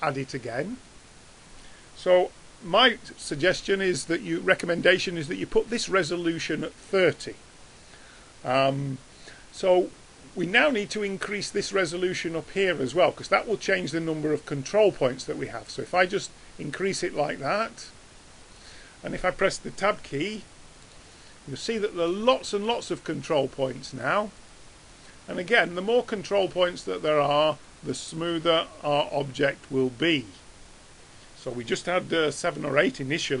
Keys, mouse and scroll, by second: 19.9 Tab, 20.3-21.6 middle drag, 23.2-26.8 drag, 26.8 middle click, 27.0-30.9 drag, 30.9-33.4 middle drag.